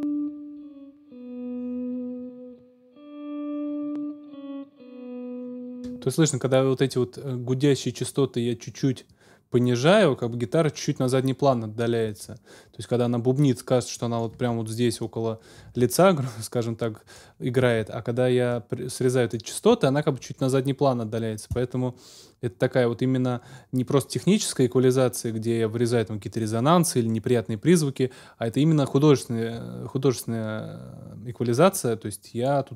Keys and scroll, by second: 5.7 space.